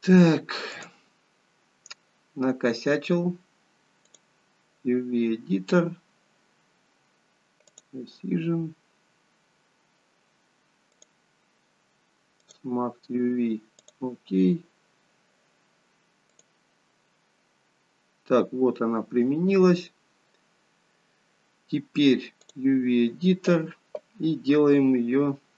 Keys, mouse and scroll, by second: 16.6 click, 18.1-19.2 scroll up 2.